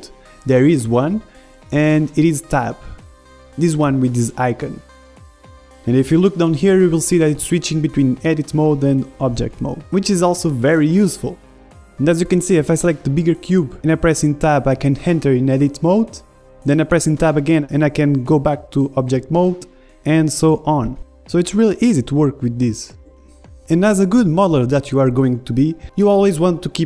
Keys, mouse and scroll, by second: 1.2 Tab, 2.2 Tab, 2.9 Tab, 6.8 Tab, 8.3 Tab, 9.7 Tab, 10.5 Tab, 10.9 Tab, 13.0-15.7 right drag, 14.6 Tab, 15.7 a, 17.0 Tab, 18.0 Tab, 18.5 Tab, 18.9 click, 19.3 click.